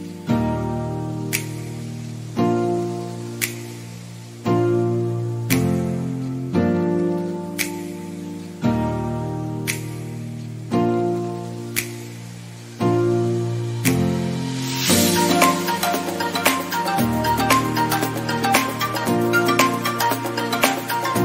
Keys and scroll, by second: 7.1 ctrl+d.